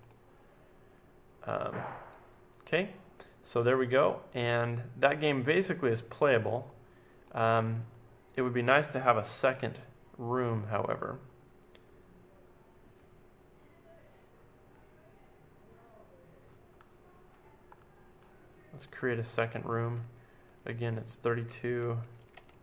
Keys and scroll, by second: 21.9-22.6 typing.